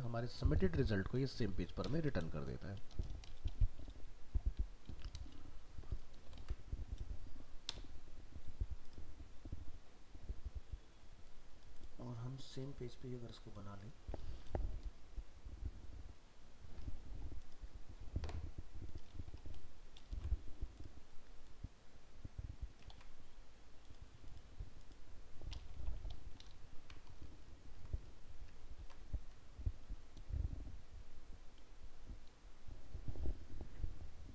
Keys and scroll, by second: 6.4 ctrl+s, 20.1 ctrl+c, 22.9 ctrl+v, 28.8 ctrl+s.